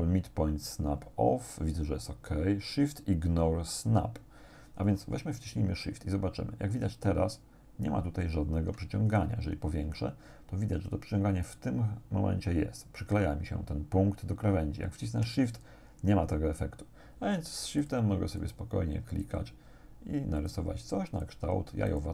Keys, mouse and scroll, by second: 9.1-9.7 shift+scroll up 3, 17.9 shift+click, 18.4 shift+click, 19.1 shift+click, 20.4 shift+click, 21.1 shift+click, 21.9 shift+click.